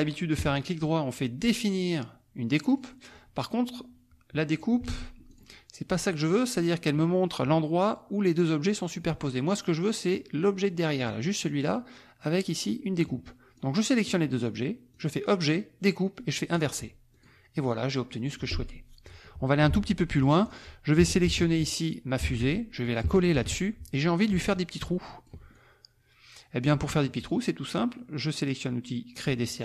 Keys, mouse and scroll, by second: 0.4 right click, 2.7 middle click, 4.9 ctrl+z, 5.4 ctrl+click, 6.3 click, 13.5 click, 14.9 click, 16.5 click, 17.2 click, 17.6 click, 19.7 alt+Tab, 20.5 click, 21.2 ctrl+c, 22.2 alt+Tab, 22.5 alt+click, 23.3 ctrl+v, 24.7 ctrl+click, 25.5-27.0 ctrl+drag, 29.1 click.